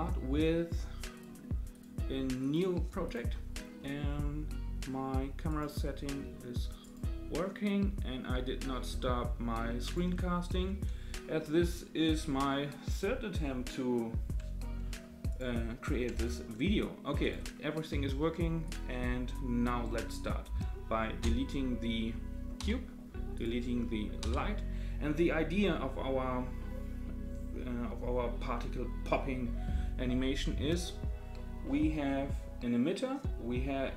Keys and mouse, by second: 1.7-3.1 drag, 2.7-3.0 middle drag, 5.6 click, 6.1 space, 6.8 click, 8.9 space, 9.8 click, 10.5 space, 15.3 click, 16.1 space, 17.2 click, 18.7 click, 22.6 Delete, 23.3 click, 24.2 Delete.